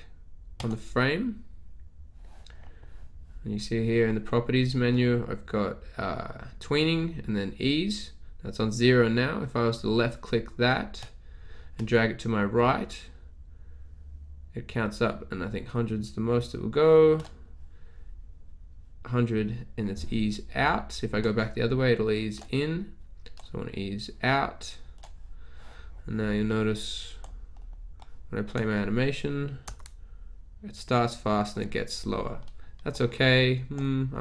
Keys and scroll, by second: 29.7 Return.